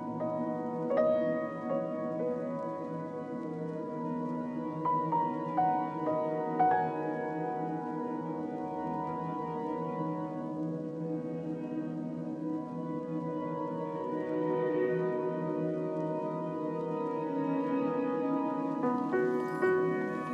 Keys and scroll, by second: 5.3 z.